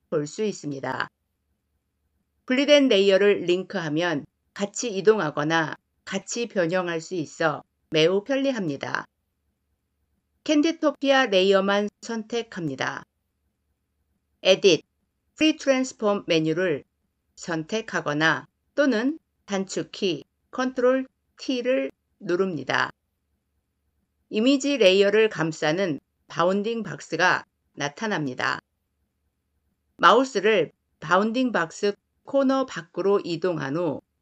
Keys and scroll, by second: 14.3 ctrl+t.